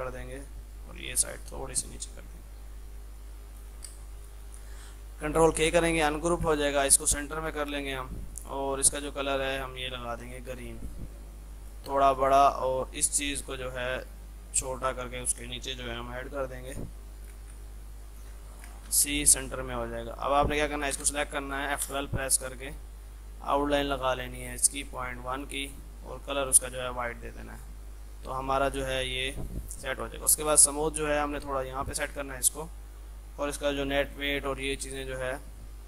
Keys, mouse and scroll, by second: 3.9 space, 4.3 click, 5.6 ctrl+k, 6.4 shift+click, 6.6 c, 7.0-17.4 drag, 17.5 c, 17.6 click, 18.9 c, 19.3 click, 21.0 F12, 23.5 click, 26.4 right click, 27.6-30.3 drag, 30.3 shift+Page_Up, 31.8-34.9 drag.